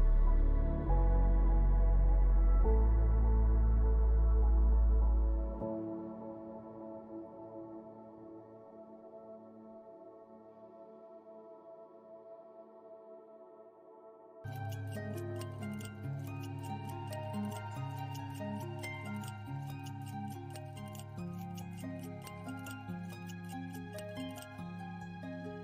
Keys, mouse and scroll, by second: 0.1 click, 1.2-1.6 scroll up 1, 1.6 middle click, 4.4 middle click, 5.5 middle click, 5.6 middle click, 5.8 middle click, 6.2 middle click, 9.4 middle click, 11.6 middle click, 15.5 middle click, 16.5 middle click.